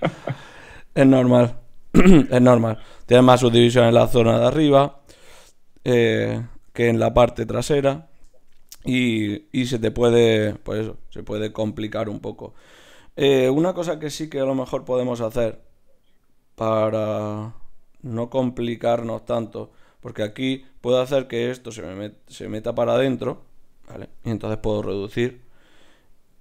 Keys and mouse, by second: 0.1 g, 1.0 click, 1.0 g, 1.8 g, 2.1-3.6 drag.